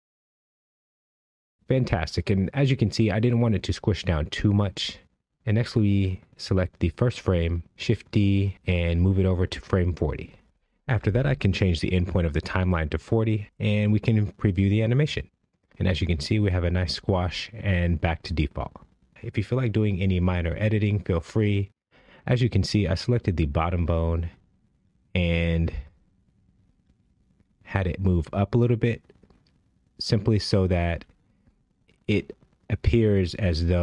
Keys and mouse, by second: 1.2 i, 6.3 click, 8.0 shift+d, 9.8-12.0 drag, 13.1 space, 19.9 space, 21.6 click, 24.2 click, 26.8 click, 28.4 g, 29.8-30.6 right drag, 30.6 g, 31.3 right click, 32.2 g.